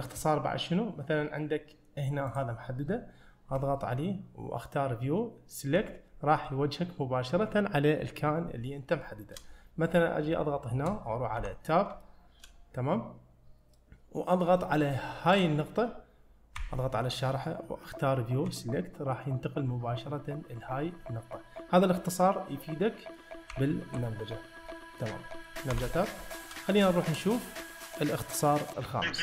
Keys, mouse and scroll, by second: 0.5-1.9 scroll up 1, 2.3 click, 6.5-7.4 middle drag, 8.7 scroll down 1, 9.1-9.4 shift+middle drag, 9.9 click, 10.4-11.0 shift+middle drag, 11.5 Tab, 12.1-14.4 shift+middle drag, 15.4 click, 16.6 `, 20.5 scroll down 2, 21.1-21.5 scroll down 3, 22.0-22.9 scroll down 3, 22.9 middle click, 23.6 `, 24.7 middle click, 25.8 Tab, 27.0 shift+middle click.